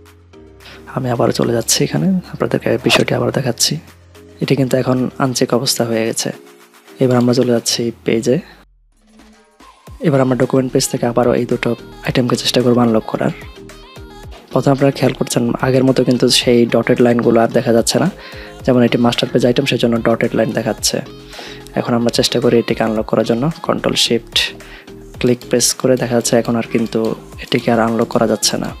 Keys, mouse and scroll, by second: 15.1 ctrl+2.